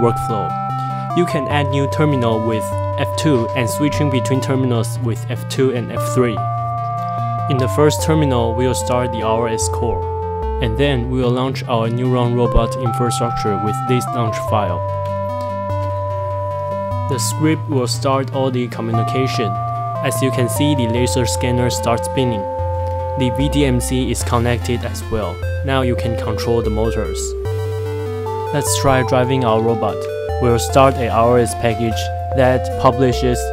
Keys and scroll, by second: 2.5 F2, 3.7 F3, 4.0 F3, 5.0-6.6 typing, 11.1 F4, 13.9 Up, 15.2 Return, 26.3 F4, 28.0-31.5 typing, 32.4 Tab, 32.6 typing.